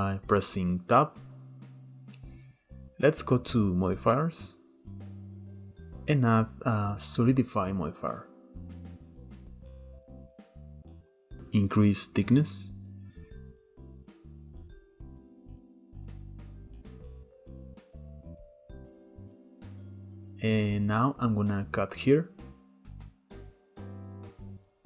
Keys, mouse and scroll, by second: 2.7 click, 6.5 click, 12.3-14.0 shift+drag, 14.0 middle click, 14.2 scroll up 1, 14.4-15.6 middle drag, 15.6 KP_7, 16.4 Tab, 16.5 click, 17.0 Tab, 17.8-19.6 shift+middle drag, 19.6 k.